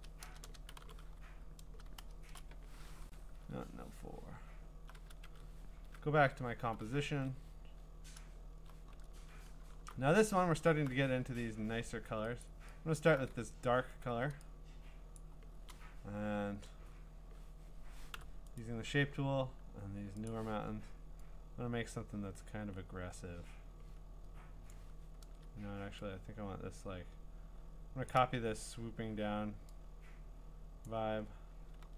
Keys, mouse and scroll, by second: 0.0-2.4 typing, 6.3 ctrl+Tab, 7.1 ctrl+Tab, 7.8-8.5 scroll, 9.8 b, 10.2-10.8 scroll, 12.4 alt+click, 12.9 alt+click, 13.7-14.1 scroll, 15.1-16.4 scroll, 15.2 click, 18.2 u, 18.6 right click, 19.3 scroll, 20.3 click, 24.7 click, 25.2 ctrl+z, 28.1 click, 30.8 click, 31.8 ctrl+z.